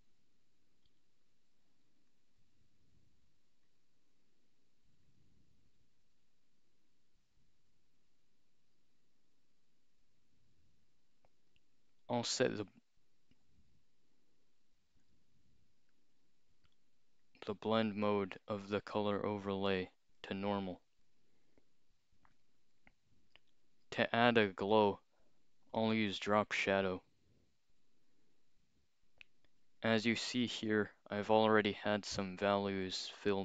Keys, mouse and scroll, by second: 2.1 click, 3.6 click, 5.1 click, 10.7-11.0 scroll down 2, 17.3 click, 20.2 click, 21.0 click, 26.2 click, 31.6 click, 33.3 click.